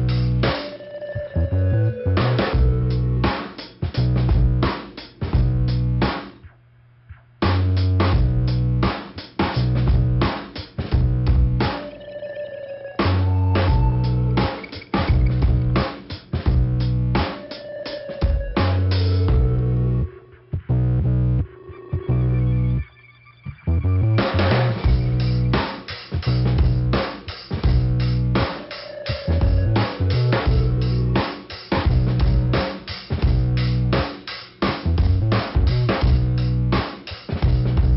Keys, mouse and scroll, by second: 0.0 click, 0.8 middle click, 1.8 scroll up 1, 3.8 scroll down 2, 7.1 click, 8.0 scroll down 1, 8.6 scroll down 1, 9.8 click, 10.5 scroll up 2, 12.4 click, 13.0 Delete, 13.0 click, 13.1 Delete, 13.9 scroll down 2, 17.0 ,, 17.9 click, 18.7 click, 20.1 click, 21.1 click, 21.7 click, 21.8 click, 23.9 click, 26.0 click, 28.3-28.6 scroll up 1, 28.6 click, 28.7 click, 29.3-30.0 scroll down 1, 31.8 scroll down 1, 33.5 scroll up 2, 35.9 click, 36.4 click, 36.7 click, 36.9 double click, 37.4 double click.